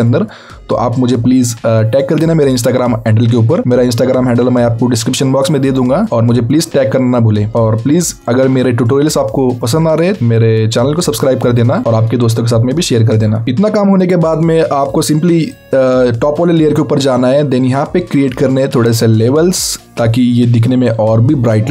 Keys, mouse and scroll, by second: 5.9 click, 7.5-7.9 scroll down 1, 7.9-8.3 scroll up 1, 9.2-9.6 scroll down 1, 10.1 alt+scroll up 2, 10.4 click, 15.5 click.